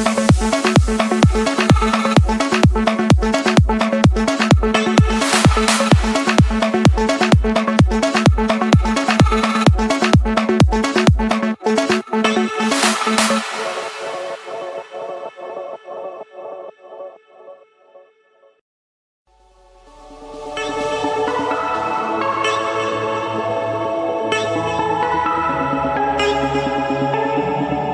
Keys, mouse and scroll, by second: 0.0-0.4 typing, 3.0 click, 6.0 click, 7.4 click, 8.9 shift+click, 10.7 c, 11.4 o, 11.9 Return, 14.6 click, 16.3 a, 16.9 Return, 19.4-20.5 typing, 20.9 Return, 23.5 typing, 24.7 Return.